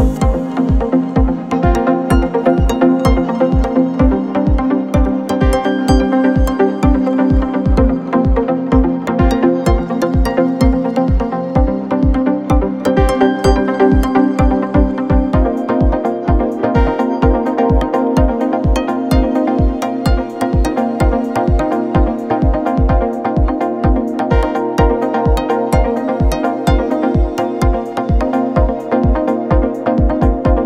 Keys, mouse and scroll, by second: 1.8-6.1 drag, 6.1 g, 11.6 r, 17.9-21.0 shift+drag, 21.8-22.5 scroll down 8, 23.7-24.4 drag, 24.4-25.1 scroll down 6, 25.8-26.5 drag, 26.5-27.2 scroll down 6, 27.4 scroll down 3, 28.6-29.2 drag, 29.2-29.8 scroll down 4, 30.5-30.6 drag.